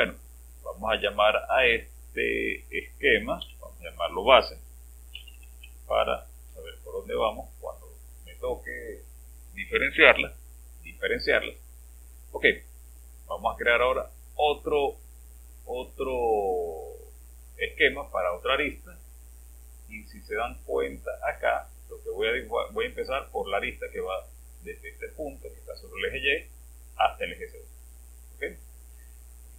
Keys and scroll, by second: 3.4 Home, 4.9-6.0 typing, 6.3 Return.